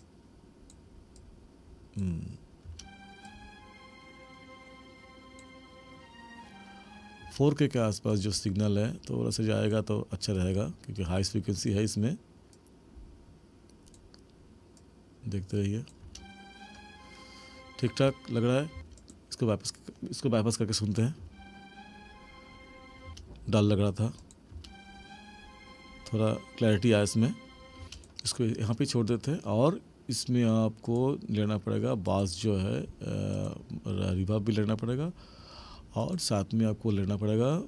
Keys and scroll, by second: 2.7 space, 7.3 space, 16.1 space, 18.7 space, 21.2 space, 23.1 space, 24.5 space, 27.8 space.